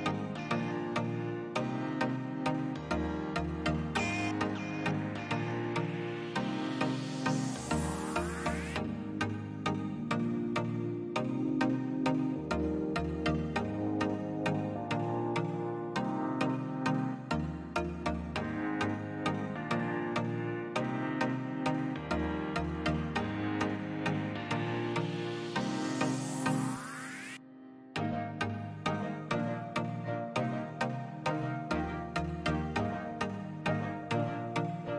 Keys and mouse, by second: 1.1 click, 2.0 click, 2.2-2.8 middle drag, 3.1 KP_0, 6.2 s, 7.0 click, 7.4 g, 7.6 x, 8.3 click, 10.8 s, 12.1 click, 14.0-14.3 middle drag, 14.7-15.0 shift+middle drag, 15.4 shift+d, 15.6 shift+z, 17.2 drag, 17.5 s, 18.5 click, 19.1 KP_0, 20.7 g, 20.9 x, 23.7 click, 24.9 s, 25.7 click, 26.4 click, 27.0 s, 28.3 click, 29.2 click, 30.3 click, 31.1 g, 31.3 x, 32.2 click, 33.3 g, 33.7 x, 34.2 drag.